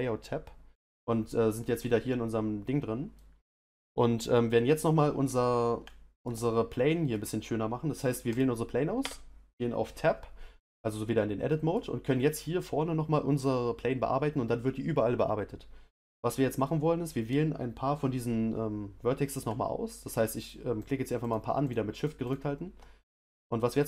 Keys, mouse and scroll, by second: 1.7-2.1 scroll up 1, 2.1-8.3 middle drag, 8.3 click, 9.0 Tab, 11.5-19.9 middle drag, 19.9 shift+click, 20.4 shift+click, 20.8 shift+click, 21.2 shift+click, 21.6 shift+click, 22.0 shift+click, 22.2 shift+click.